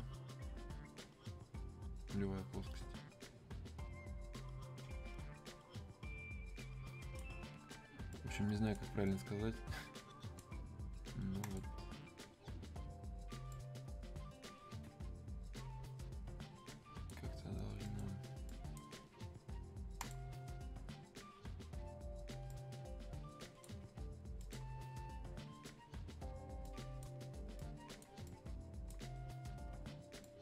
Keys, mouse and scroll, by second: 22.5-27.6 drag, 27.6-30.2 drag, 30.2-30.4 drag.